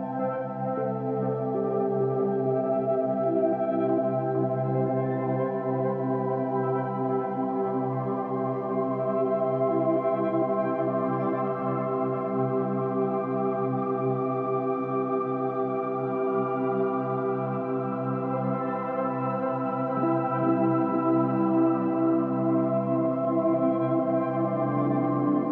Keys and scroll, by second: 13.6 ctrl+z, 14.3 ctrl+z.